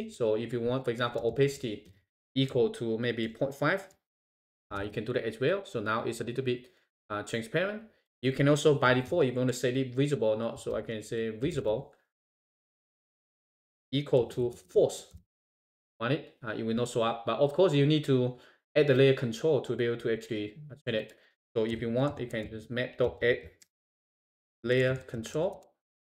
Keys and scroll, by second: 4.8 shift+Return, 15.6 shift+Return.